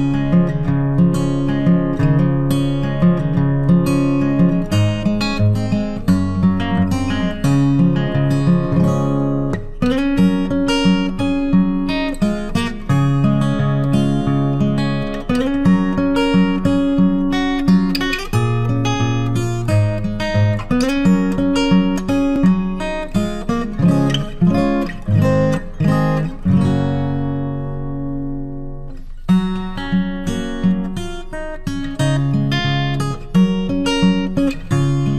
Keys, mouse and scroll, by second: 8.1 click, 17.7 ctrl+c, 18.2 ctrl+f, 20.1-20.9 typing, 26.0 click, 30.5 ctrl+a, 33.7 click.